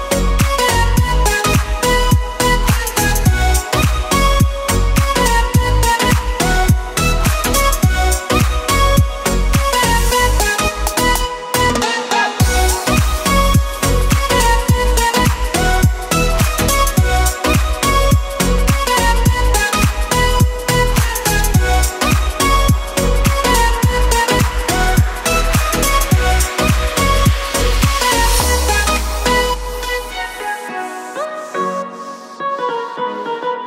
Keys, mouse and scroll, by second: 0.1 KP_1, 1.8 Tab, 2.6 s, 4.3 Tab, 5.2 click, 6.6 KP_1, 7.2 Tab, 7.6 s, 9.6 Tab, 12.8 ctrl+click, 14.2 click, 16.7 click, 17.7 Tab, 18.2 a, 19.8 s, 22.2 Tab, 23.5 click, 25.4 KP_1, 28.0 KP_Decimal, 28.6-28.9 scroll down 7, 28.8-29.5 scroll up 2, 29.6 scroll up 4, 30.6 Tab, 31.7 s, 33.5 Tab.